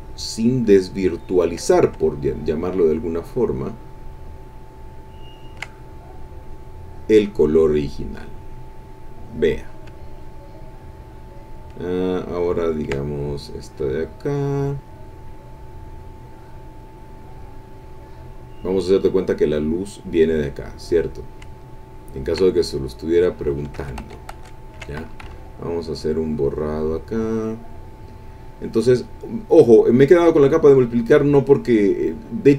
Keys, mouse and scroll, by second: 2.9 ctrl+click, 3.7-5.7 ctrl+drag, 5.9-9.7 ctrl+drag, 12.6 ctrl+click, 13.0-17.0 ctrl+drag, 17.3-18.8 drag, 22.2-23.6 ctrl+drag, 23.8 ctrl+z, 25.2 ctrl+e, 25.4-32.5 ctrl+drag.